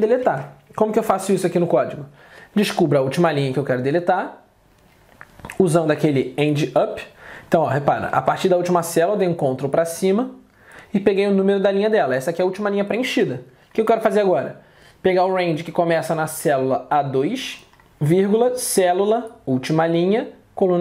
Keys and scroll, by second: 1.1 alt+Tab.